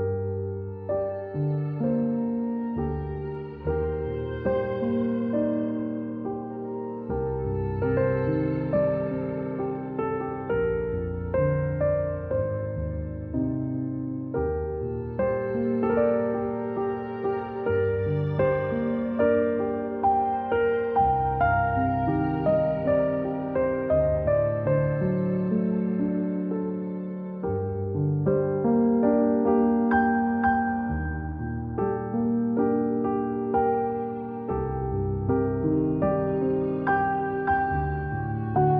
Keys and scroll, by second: 3.4-5.5 typing, 11.8 a, 19.1 ctrl+c, 19.6 ctrl+shift+v, 24.4 i, 32.9 v, 34.0 ctrl+shift+[, 34.1 ctrl+shift+[, 35.0 a, 35.8 a.